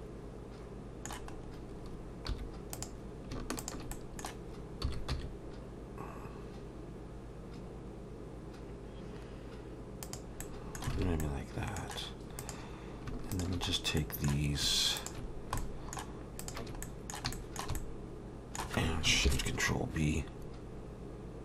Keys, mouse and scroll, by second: 1.3-2.3 scroll up 2, 2.3 1, 2.7 click, 3.6 shift+click, 3.9 middle click, 4.8 s, 10.4 middle click, 10.9 alt+a, 11.2 middle click, 12.4 click, 13.3 shift+click, 14.0 middle click, 15.0 shift+click, 15.3 scroll down 1, 15.6 shift+middle click, 16.4 shift+click, 16.8 middle click, 17.3 shift+middle click, 17.8 middle click, 19.3 ctrl+shift+b.